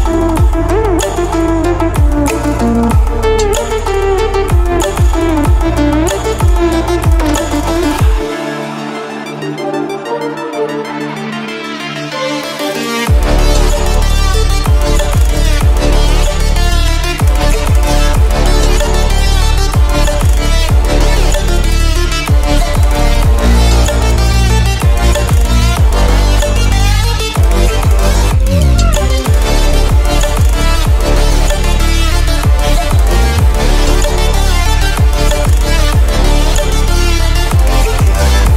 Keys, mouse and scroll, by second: 4.4 ctrl+0, 5.7 v, 7.8 click, 8.0-11.4 alt+drag, 11.4 ctrl+d, 16.6 alt+scroll up 1, 17.6 alt+scroll down 1, 18.8 ctrl+a, 21.1-23.7 drag, 23.7 shift+m, 25.7-28.5 alt+drag, 28.5-31.6 alt+drag, 31.8-36.6 alt+drag, 36.6 v, 37.9-38.5 drag.